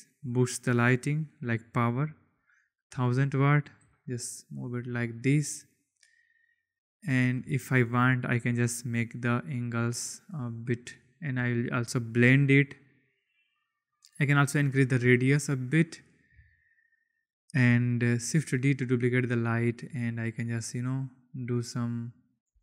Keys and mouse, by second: 0.3 click, 0.9-2.7 drag, 2.5 0, 3.9 g, 4.1 z, 7.2 click, 7.8 shift+click, 9.5-10.5 drag, 11.1-12.2 drag, 14.6-16.2 drag, 18.4 shift+d, 19.2 click, 19.4 r, 20.1 g.